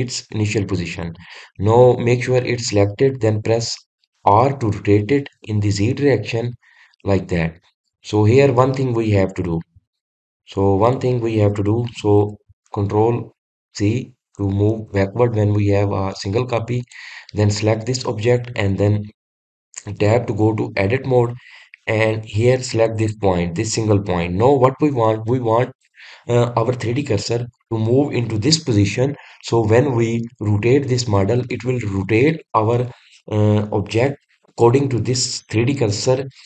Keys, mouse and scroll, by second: 11.2 click, 11.7 click, 13.7 ctrl+z, 14.7 ctrl+z, 17.7 click, 20.8 Tab, 21.5 scroll up 2, 23.8 click.